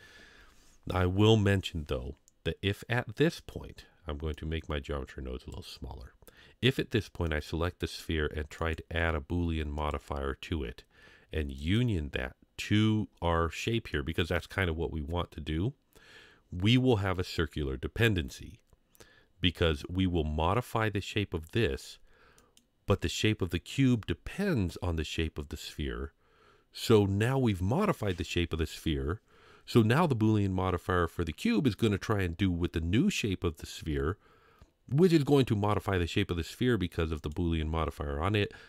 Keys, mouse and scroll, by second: 4.3-5.6 drag, 7.3 click, 9.9 click, 11.6 click, 13.9-14.4 middle drag, 19.2-20.9 scroll up 2, 22.4 click, 37.2 click.